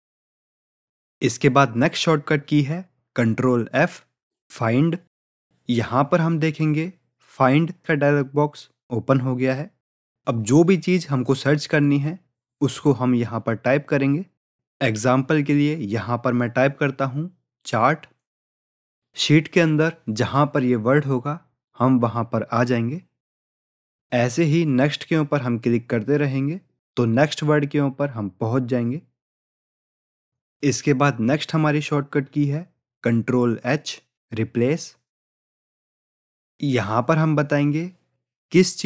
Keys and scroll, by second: 7.1 ctrl+f, 36.3 ctrl+h.